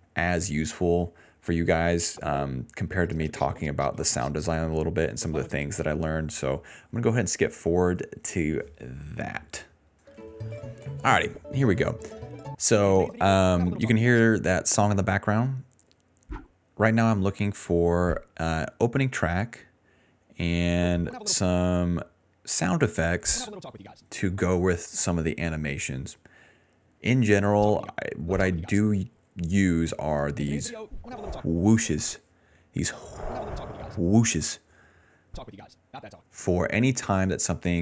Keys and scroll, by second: 2.5 d, 4.6-6.0 typing, 10.0 space, 11.1 space, 11.4 space, 12.5 space, 12.8 space, 13.0 s, 14.2 space, 15.8-18.2 typing, 20.8 space, 21.3 space, 23.1 space, 24.0 space, 25.8 d, 25.9 d, 27.5-31.5 typing, 33.1 space, 34.1 space, 34.2 s, 35.1 space, 36.2 space.